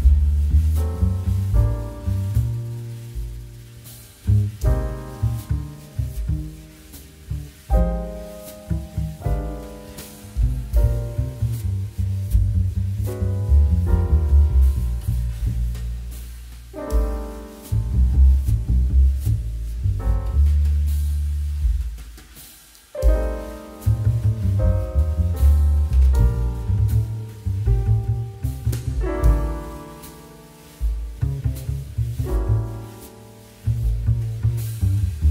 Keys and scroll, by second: 10.9 shift+2, 18.0 2, 34.3 g.